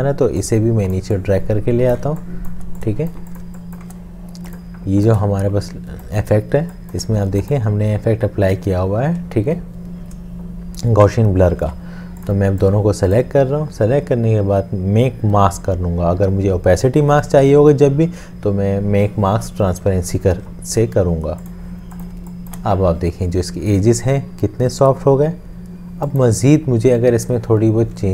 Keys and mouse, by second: 1.7 shift+click, 2.0 shift+space, 5.2 space, 5.3 shift+click, 8.2 space, 11.6 ctrl+z, 22.1 space.